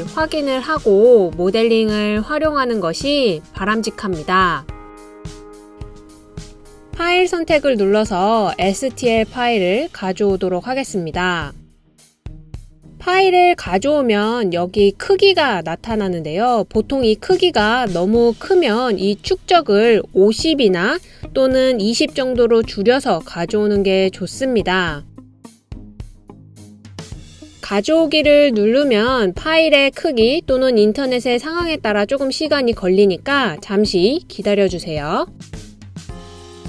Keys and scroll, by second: 21.3-22.6 typing.